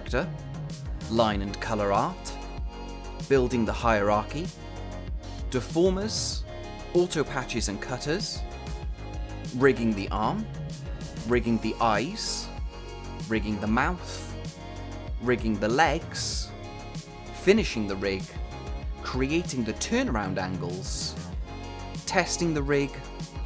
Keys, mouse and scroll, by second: 1.0 click, 3.2 click, 3.4 scroll up 1, 3.5 click, 5.1 p, 5.4 click, 6.9 scroll up 1, 7.1 click, 11.2-13.1 drag, 13.2 click, 15.5 space, 16.4 click, 17.2 click, 19.0 click, 20.9 ctrl+c, 21.2 click, 21.9 typing, 22.6 click.